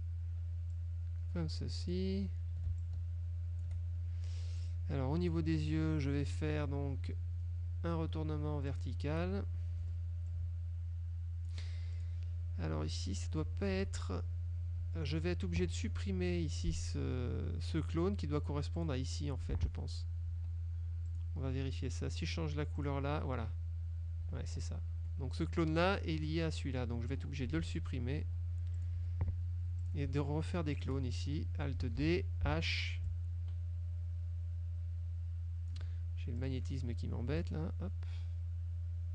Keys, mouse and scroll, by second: 0.9-2.2 drag, 2.9 shift+click, 4.7 click, 5.3 F2, 5.3 click, 8.8 click, 9.9 F1, 10.4-11.7 ctrl+drag, 12.1 ctrl+click, 13.1 F2, 13.3 click, 14.9 F1, 18.9 click, 20.4 F2, 21.2 click, 22.9 click, 24.5 ctrl+z, 25.1 ctrl+F1, 25.5 click, 27.7 Delete, 28.9 click, 29.1 Delete, 29.9 click, 30.9 shift+click, 32.1 alt+d, 32.6 alt+h, 33.2-36.0 ctrl+drag, 36.5 click, 37.5-39.1 ctrl+drag.